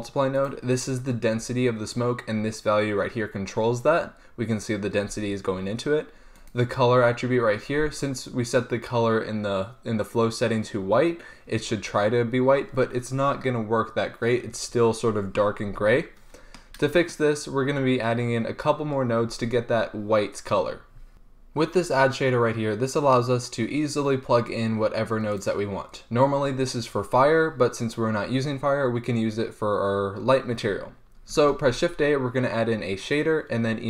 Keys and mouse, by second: 0.5-2.2 drag, 6.5-12.9 drag, 31.6 shift+a.